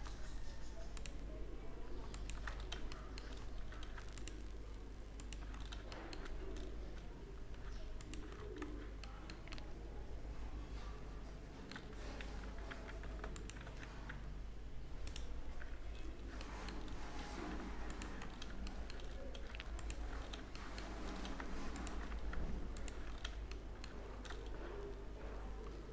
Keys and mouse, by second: 0.8-2.3 right drag, 2.3 middle click, 2.4 right click, 2.5 middle click, 3.6-5.8 middle drag, 8.0-9.4 drag, 12.4 z, 12.6 z, 13.6 w, 16.8 click, 18.1 middle click, 19.6 middle click, 21.6 middle click, 22.8 middle click, 23.9 middle click, 24.1 middle click, 24.3-25.9 middle drag.